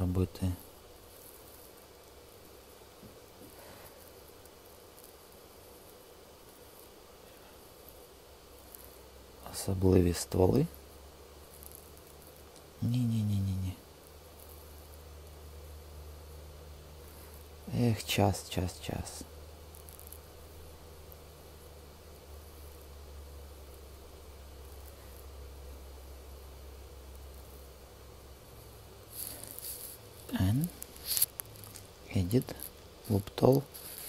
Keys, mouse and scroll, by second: 1.5 super+z, 2.0 space, 3.7 super+z, 6.7-10.5 drag, 12.0 click, 12.4 super+z, 13.7 super+z, 15.6-17.9 drag, 17.2 super+z, 20.7-24.0 drag, 26.0-28.3 shift+drag, 30.2 n, 33.2 click.